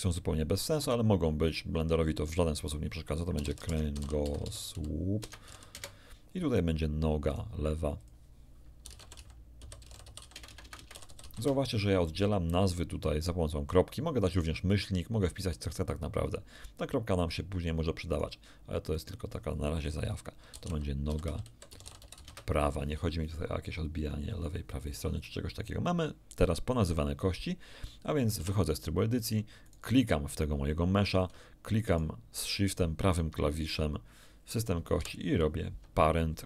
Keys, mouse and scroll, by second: 1.4 right click, 2.3 click, 3.3-5.4 typing, 5.7 Return, 7.3 click, 7.9 click, 8.8-11.2 typing, 11.3 Return, 18.1 right click, 18.9 click, 20.5-22.1 typing, 28.3 Tab, 29.6 right click, 31.9 shift+right click, 34.9 ctrl+p.